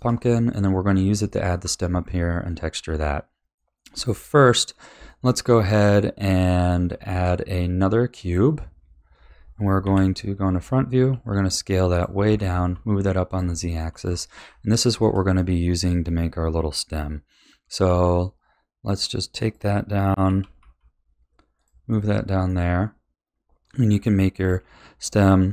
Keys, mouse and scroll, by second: 2.0 scroll up 2, 3.5-7.1 middle drag, 7.1 shift+a, 8.7-9.8 scroll down 5, 9.8 KP_1, 11.1 s, 12.3 g, 13.6-14.0 shift+middle drag, 14.0-14.8 scroll up 6, 14.8 shift+middle drag, 15.0 shift+scroll up 1, 17.8 s, 20.2 g, 21.9-23.5 middle drag, 23.5 scroll up 1, 23.6-24.4 middle drag, 24.4 s.